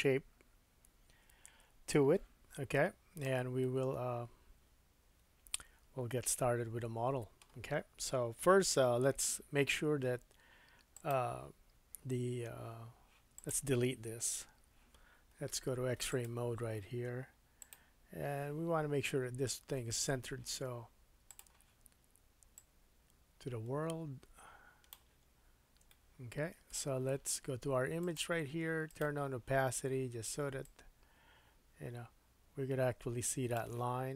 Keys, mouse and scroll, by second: 3.0-3.3 scroll down 1, 3.3-3.6 scroll up 1, 3.6 middle click, 8.7 KP_1, 11.1-13.3 middle drag, 13.3 click, 13.5-16.1 middle drag, 14.4 Delete, 16.1-17.7 drag, 17.7 middle click, 18.5-20.6 scroll up 3, 20.6-21.2 scroll up 1, 21.2-28.1 drag, 25.3-25.8 scroll up 3, 25.9 shift+middle click, 28.1 middle click, 28.9 click, 29.0-30.6 middle drag, 30.6-34.1 drag, 34.0-34.1 scroll up 5.